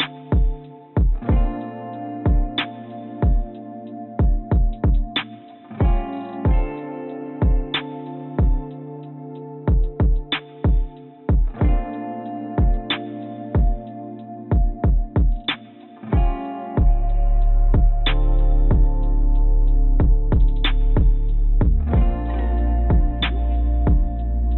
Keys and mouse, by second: 9.5 click, 12.2 click, 13.4 click, 15.6-16.2 drag, 18.3 click, 18.6 click, 19.4 click, 20.0-21.0 drag, 21.5 click, 22.4 click.